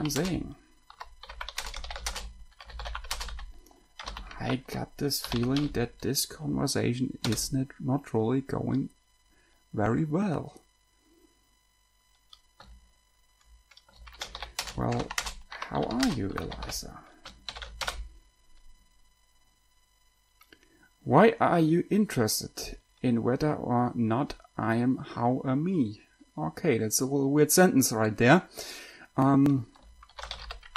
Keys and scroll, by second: 0.0-6.3 typing, 7.3 Return, 8.8 s, 14.4-17.8 typing, 18.1 Return, 30.2-30.7 typing.